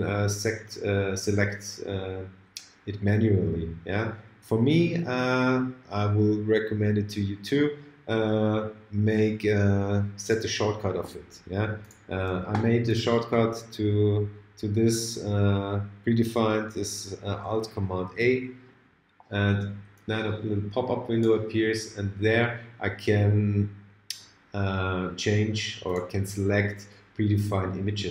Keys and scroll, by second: 18.1 alt+super+a.